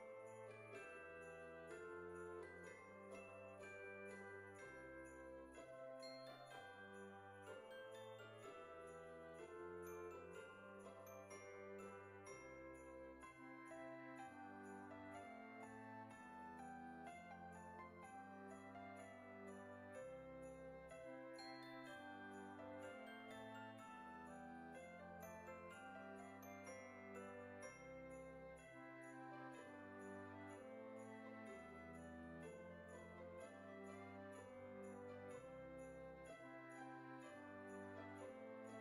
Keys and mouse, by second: 0.4 click, 1.8 o, 11.4 click, 12.4 click, 13.3 g, 14.8 click, 15.4 middle click, 16.9 KP_3, 17.9 g, 19.2 click, 19.7 KP_1, 20.3 click, 24.1 click, 26.6 KP_3, 27.5 r, 27.9 KP_Subtract, 28.4 KP_9, 30.7 g, 31.6 click, 32.2 s, 33.8 click, 34.0 s, 35.5 click, 35.9 shift+middle click, 37.2 Tab.